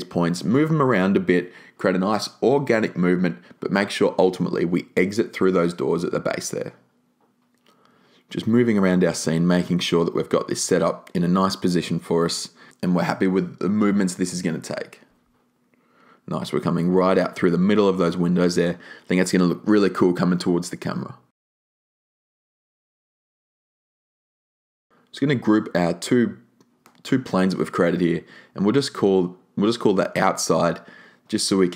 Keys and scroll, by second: 25.7 alt+shift+g, 26.7-28.7 typing, 28.9 Return.